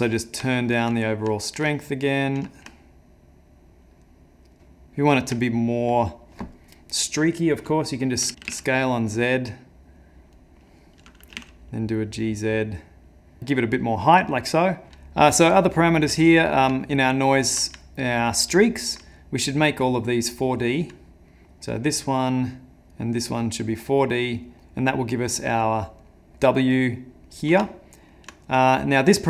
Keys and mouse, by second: 0.1 middle click, 0.5 ctrl+middle click, 1.0 middle click, 1.4 ctrl+middle click, 2.6 shift+click, 4.8 shift+middle click, 5.4 ctrl+middle click, 8.3 s, 8.4 s, 11.3 g, 13.4 shift+middle click, 15.1 middle click, 15.6 ctrl+middle click, 16.2 middle click, 16.8 ctrl+middle click, 18.6 ctrl+middle click, 19.4 click, 21.3 middle click, 22.3 click, 26.1 middle click, 26.6 middle click, 27.3 middle click, 27.7 ctrl+middle click, 27.9 ctrl+middle click.